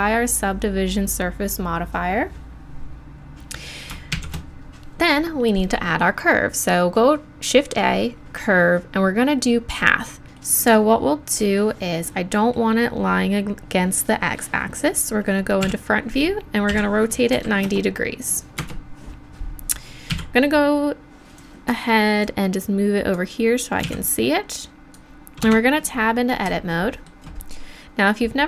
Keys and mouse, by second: 4.1 shift+a, 10.6-12.2 middle drag, 15.6 KP_1, 16.7 r, 20.1 z, 21.4-25.4 drag, 23.8 z, 25.4 Tab.